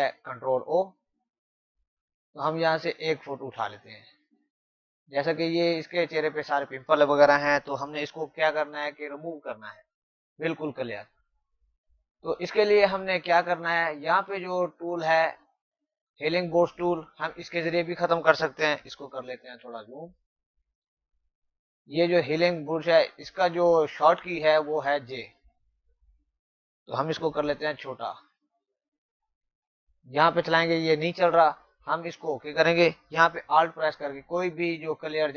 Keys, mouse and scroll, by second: 14.2 click, 19.0 z, 19.5 click, 27.7 [, 29.8 click.